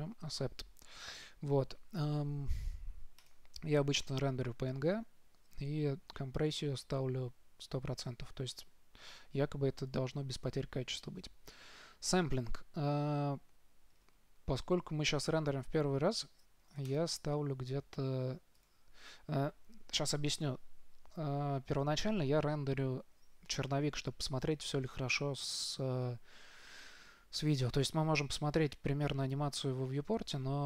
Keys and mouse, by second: 0.5-1.8 drag, 3.5-5.4 drag, 17.2-18.7 drag, 28.1 click, 29.8 click.